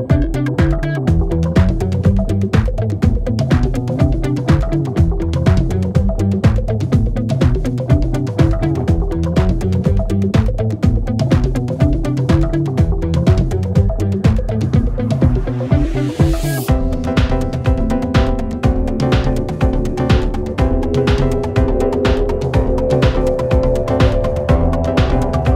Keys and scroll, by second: 1.4 ], 3.2 4, 14.8 ctrl+z, 16.8 e, 17.4 3, 17.8 ], 20.2 4.